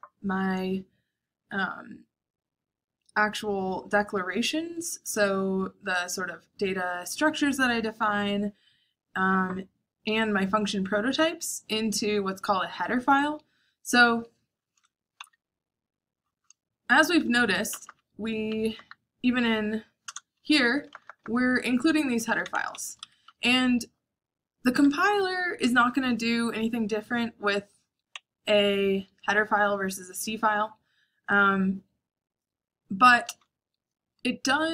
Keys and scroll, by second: 17.5 Up, 17.6 Up, 18.5 Up, 19.1 Up, 19.8 Return, 20.5 k, 20.6 k, 20.8 k, 20.9 k, 22.1-23.7 typing, 22.7 Escape, 27.8-28.1 typing.